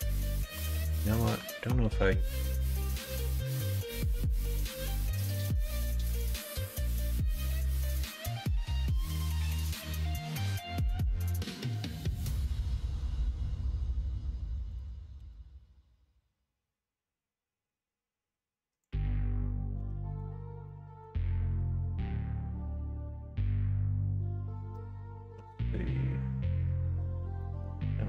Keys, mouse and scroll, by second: 1.5 alt+click, 2.7 x, 4.8 middle click, 5.9 middle click, 6.5 ctrl+z, 7.0 middle click, 8.2 alt+click, 9.0 alt+click, 9.4 alt+shift+click, 9.8 x, 11.6 middle click, 12.7 click, 13.6 g, 15.1 ctrl+b, 19.5 middle click, 19.7 Tab, 20.6 middle click, 21.4 middle click, 21.7 middle click, 22.5 middle click.